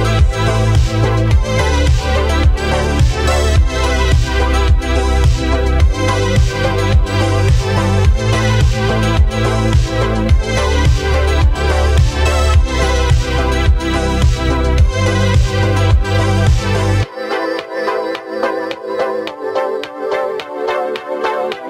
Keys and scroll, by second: 3.7 ctrl+z, 9.7 ctrl+z.